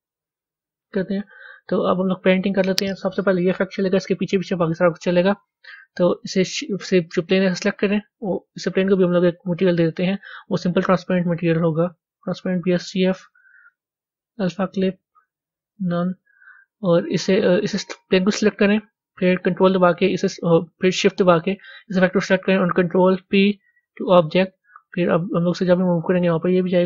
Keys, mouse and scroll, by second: 0.0-1.1 drag, 1.1-10.2 middle drag, 10.2 click, 12.1-19.7 drag, 20.7 click, 23.8 ctrl+p, 24.5 click.